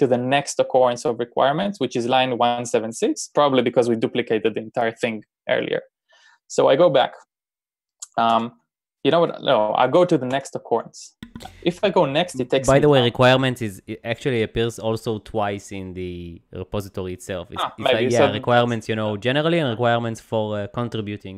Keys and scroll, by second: 8.4 shift+n, 10.4 n.